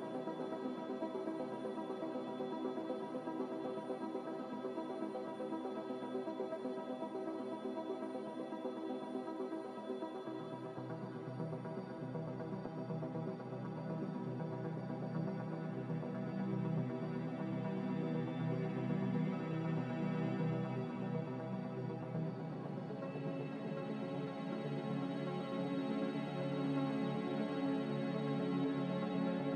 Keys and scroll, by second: 2.4 Escape, 5.5 ctrl+z, 22.3 x, 25.5 s.